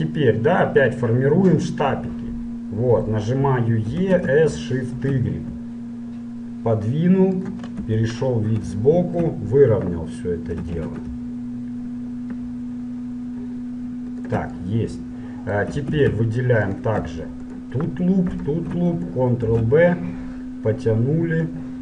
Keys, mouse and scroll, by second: 4.0 e, 8.0 KP_1, 8.9-11.2 middle drag, 10.7 s, 14.8-16.4 middle drag, 16.0 ctrl+Tab, 17.4-20.5 right drag, 19.7 ctrl+b.